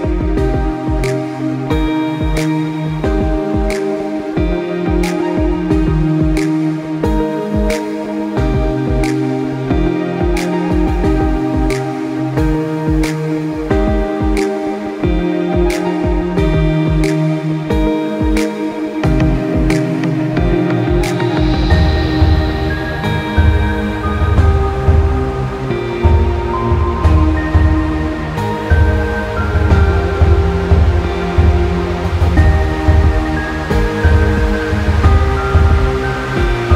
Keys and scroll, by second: 2.9 ctrl+z.